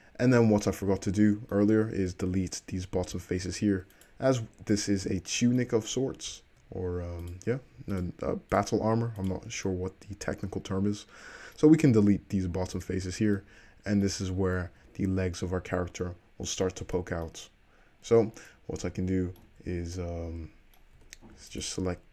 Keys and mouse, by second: 2.1 Tab, 3.5 3, 4.1 drag, 5.1-7.4 middle drag, 7.4 click, 7.5-8.1 shift+middle drag, 8.1 shift+click, 8.2-9.4 shift+middle drag, 9.4 shift+click, 9.4-13.8 middle drag, 11.9 x, 14.2 Tab, 14.8 `, 17.8 middle click, 19.6 Tab, 21.2 2, 21.4-22.0 alt+drag.